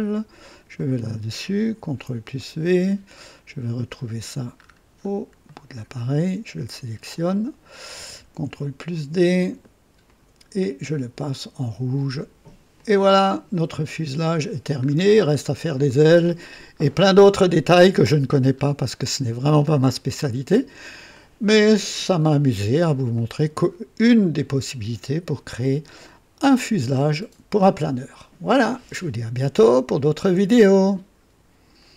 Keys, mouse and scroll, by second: 0.4 click, 1.8 ctrl+v, 2.3 ctrl+right click, 3.0-3.5 ctrl+scroll down 1, 3.7 right click, 4.5-5.2 scroll up 2, 5.4 right click, 7.0 click, 8.3 ctrl+d, 10.0 click, 11.2 click, 12.1 click, 12.7 click, 14.0 click, 14.8-15.5 scroll down 2, 15.8 right click, 16.7-17.2 scroll down 1, 17.6 right click, 18.4 scroll up 1, 19.2 scroll down 1, 19.8 right click, 21.1 scroll up 1, 23.1-25.9 drag, 26.4 scroll up 1, 27.2 scroll down 1, 30.8 right click, 31.9 click.